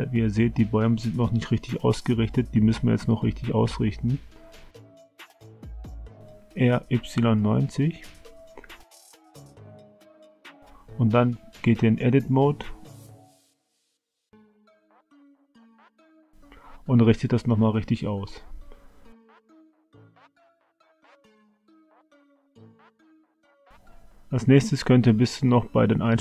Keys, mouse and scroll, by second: 3.0 middle click, 4.0 click, 5.5 r, 11.9 Tab, 13.8 click, 14.7-17.6 drag, 18.0 Tab, 19.5 middle click, 20.5-22.4 middle drag, 23.4-24.6 shift+middle drag, 24.9 middle click.